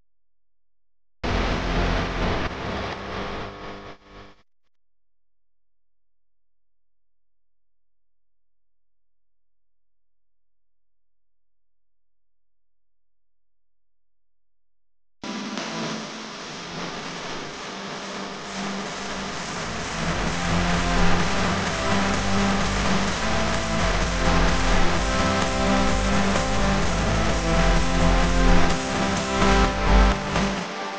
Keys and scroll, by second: 27.9 v, 29.5 Left.